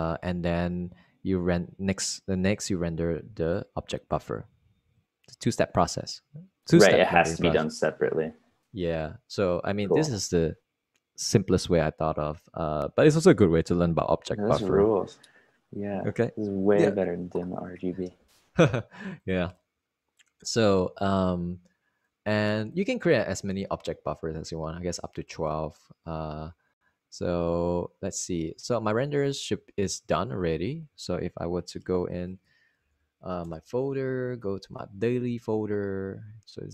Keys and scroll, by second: 35.0-36.7 typing.